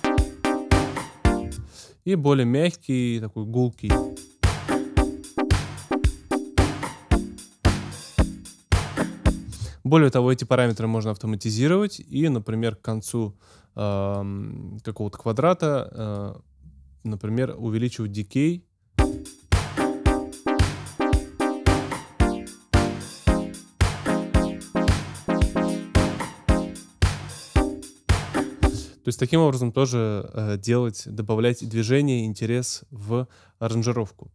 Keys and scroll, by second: 1.4 space, 3.8 space, 9.4 space, 19.0 space, 28.6 space.